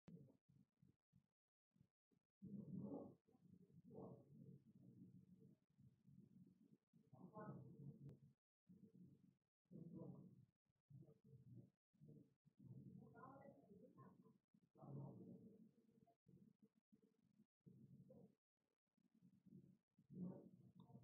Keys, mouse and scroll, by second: 1.2 click, 4.0 click, 5.8 click, 10.0 click, 11.8 click, 12.6 click, 13.5 click, 14.0 right click, 15.1 click, 16.6 click, 17.7 click, 19.2 click, 19.9 click.